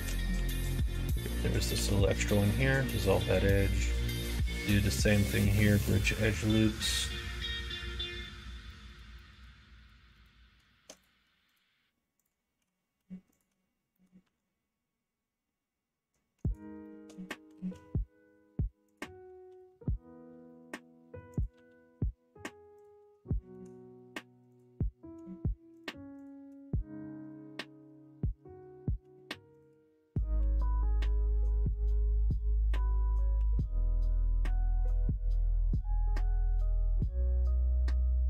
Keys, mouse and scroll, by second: 0.3 2, 0.7 click, 1.7 x, 3.9 alt+click, 5.7 ctrl+e, 8.2 middle click, 8.6 middle click, 9.1 shift+click, 10.1 click, 10.9 click, 11.4 shift+click, 13.8 middle click, 14.2 e, 16.8 middle click, 17.4 s, 19.4 e, 21.2 e, 21.5 e, 23.3 shift+middle click, 25.7 shift+click, 26.1 shift+click, 30.3 e, 33.3 e, 34.8 e, 37.7 middle click.